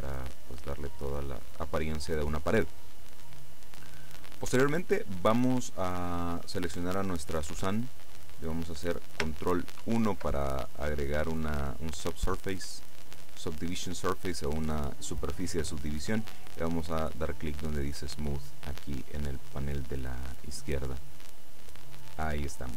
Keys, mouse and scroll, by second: 1.6 click, 6.4 right click, 9.9 ctrl+1, 21.0 click.